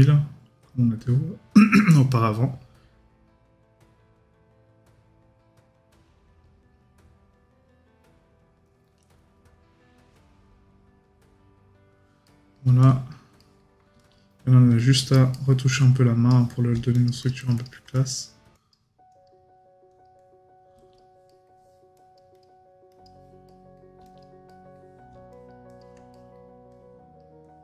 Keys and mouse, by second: 12.3 right click, 15.3 right click, 21.3 right click, 23.5 right click, 26.1 right click.